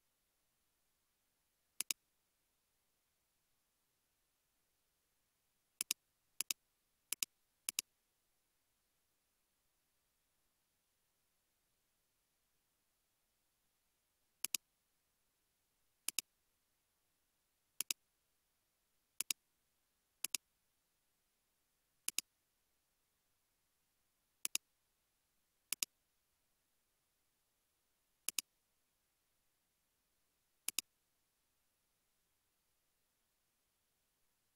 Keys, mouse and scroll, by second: 3.7-4.6 typing, 8.9-11.7 typing, 10.5 Tab, 11.9 Return, 15.3 typing, 16.5-16.8 scroll down 1, 16.9 typing, 18.5 typing, 23.4 typing, 26.3 scroll down 1, 26.9 scroll up 1, 28.6 typing, 31.8 typing, 33.1 scroll down 1, 33.5-34.1 scroll up 1, 34.1-34.4 scroll down 1.